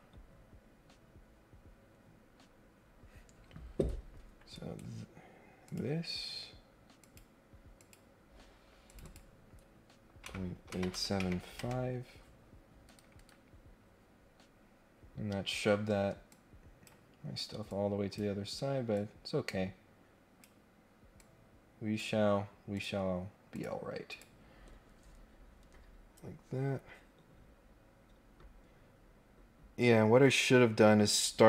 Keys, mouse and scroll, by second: 4.5 right click, 5.7 click, 7.0 click, 7.7 click, 8.8 click, 9.0 click, 12.8 Escape, 13.1 Escape, 13.5 scroll down 2, 13.7-14.2 scroll up 4, 14.4 scroll down 2, 14.6-15.1 scroll up 2, 16.3 click, 17.6 click, 18.9-20.4 drag, 21.2 click, 22.7 click, 23.5 click, 24.1 click.